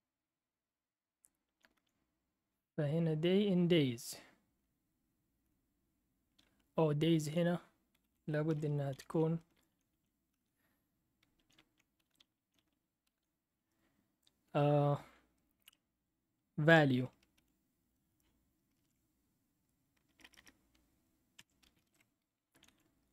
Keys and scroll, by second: 1.4 Down, 1.7 Down, 6.4-7.3 Right, 8.0 Left, 8.5-10.2 typing, 10.3 Right, 11.3 Down, 11.5 Down, 12.0 Right, 12.2 Down, 12.3 Down, 12.6 Down, 13.1 Right, 16.7 Escape, 17.4 /, 18.4-23.1 typing.